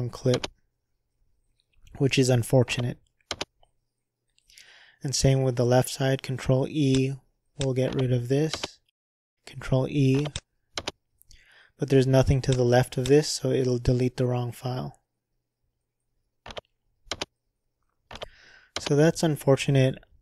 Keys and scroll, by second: 0.3 ctrl+r, 3.3 ctrl+z, 8.5 ctrl+e, 10.8 ctrl+e, 17.1 ctrl+e, 18.7 ctrl+z.